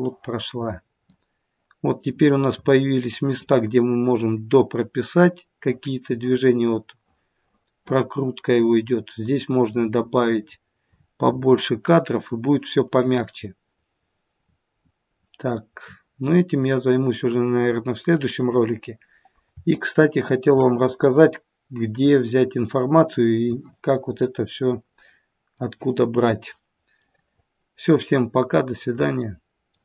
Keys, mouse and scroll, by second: 0.4 click, 19.4-20.2 scroll down 10, 20.2 shift+middle click, 22.4 click.